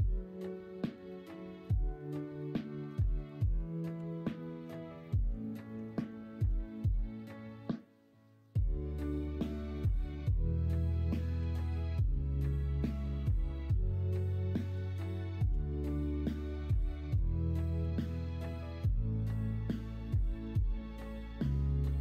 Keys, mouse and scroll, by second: 1.2-2.8 middle drag, 1.2-1.6 scroll up 1, 1.6-2.8 scroll down 1, 2.8 Tab, 3.9 h, 4.1 middle click, 4.9 middle click, 5.7 Tab, 6.4 KP_1, 6.6 KP_3, 9.9 middle click, 11.3 ctrl+r, 12.7 shift+d, 14.7 l, 15.5 x, 17.8 KP_1, 18.0 KP_3, 18.5 alt+z, 20.5 alt+z.